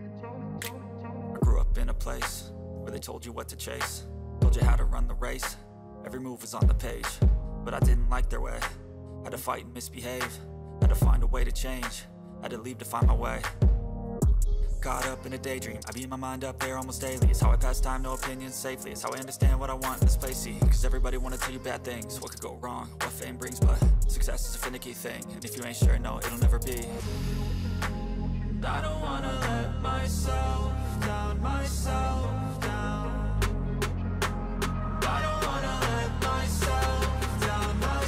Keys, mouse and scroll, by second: 21.4 double click, 22.7 right click.